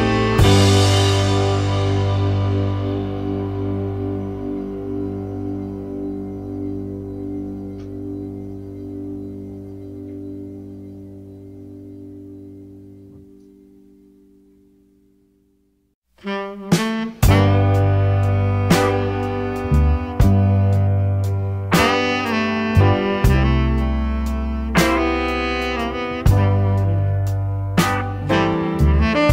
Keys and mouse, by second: 1.0-1.7 middle drag, 5.2 KP_5, 8.7 ctrl+s, 11.5-12.4 middle drag, 12.7 KP_0, 16.7 shift+a.